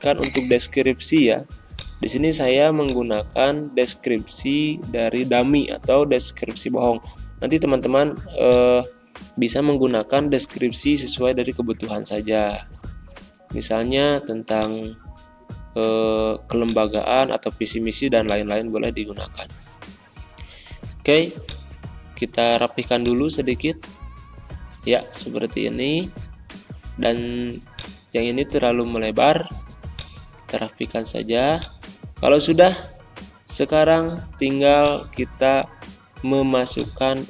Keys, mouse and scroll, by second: 0.1-4.6 drag, 4.6 ctrl+c, 5.4 alt+Tab, 6.2 alt+Tab, 6.6 alt+Tab, 7.5 ctrl+v, 8.4 click, 8.8 ctrl+a, 9.7 ctrl+[, 12.1 ctrl+], 14.5-19.6 drag, 19.6 BackSpace, 21.4 click, 22.1 Return, 22.9 click, 23.3 ctrl+a, 24.0 ctrl+], 25.2 ctrl+[, 27.7-31.6 drag, 32.2 scroll down 2, 34.7-36.7 drag.